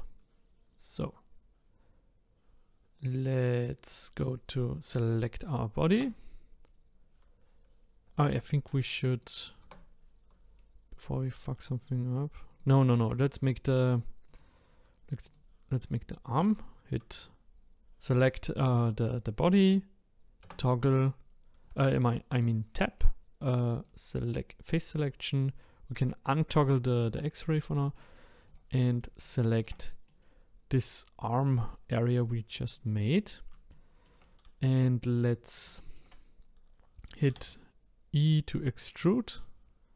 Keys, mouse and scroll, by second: 4.9 click, 5.9 Tab, 8.1 Tab, 9.1 click, 9.6 Tab, 11.1 click, 11.8 click, 12.5 click, 14.2 click, 15.2 click, 15.8 click, 20.4 Tab, 23.7 click, 27.0 click, 27.7 middle click, 28.4 click, 29.2 shift+click, 29.9 middle click, 30.2-32.6 scroll up 2, 32.6 click, 33.7-34.7 shift+middle drag, 34.7 scroll up 1, 35.3 scroll down 1, 35.7-37.3 shift+middle drag, 37.3 e.